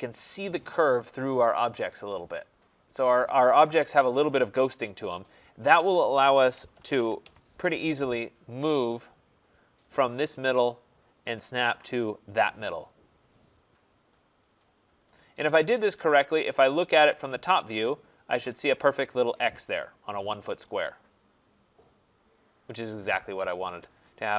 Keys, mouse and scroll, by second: 0.4-2.2 drag, 3.9-9.5 middle drag, 3.9-4.6 scroll, 6.2-7.6 typing, 9.5 scroll, 9.5 typing, 9.9 click, 10.4-11.0 scroll, 12.8 click, 13.3-14.9 scroll, 16.2 click, 16.4 click, 17.1 click, 17.3 click, 17.7 scroll, 18.7-20.8 scroll.